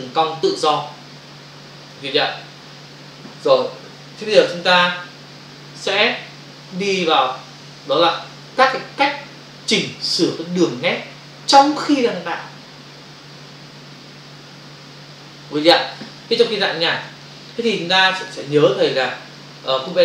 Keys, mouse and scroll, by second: 4.3 ctrl+Return, 4.4 ctrl+d, 17.0 ctrl+space, 18.5 space.